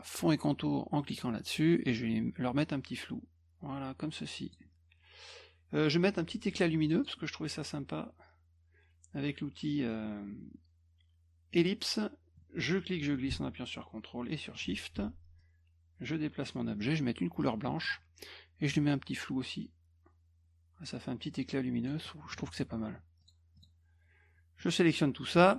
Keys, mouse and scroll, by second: 1.0 click, 2.6-4.5 drag, 6.8 click, 7.0 click, 11.5 click, 12.8-14.6 drag, 14.9 F1, 15.4-16.4 drag, 17.4 click, 18.7-21.9 drag, 23.2 click, 23.6 click, 24.6 click.